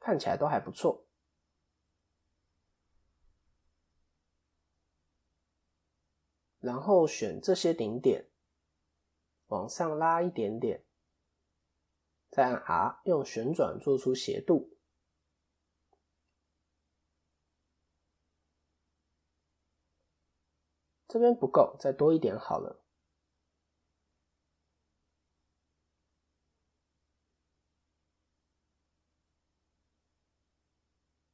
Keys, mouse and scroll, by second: 3.0 KP_1, 4.6 click, 10.1 click, 21.4 ctrl+z, 22.7 click.